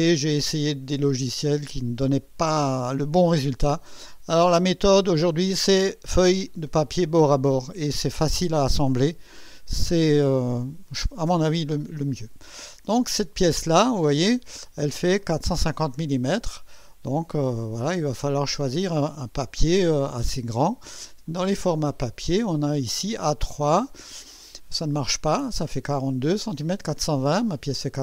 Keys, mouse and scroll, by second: 13.8 click, 19.0 click, 21.3 click.